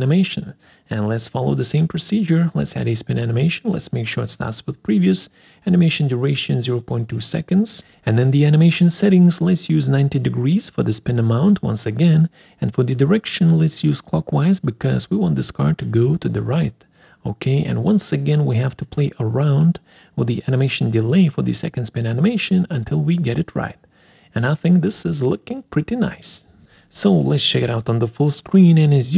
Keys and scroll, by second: 6.1-6.9 typing, 6.9 Return.